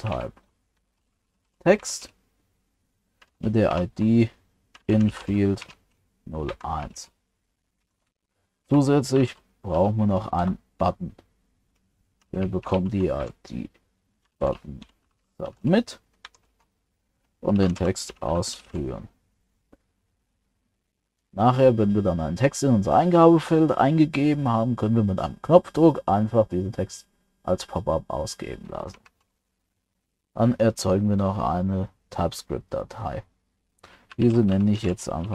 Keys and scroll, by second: 29.1 ctrl+s.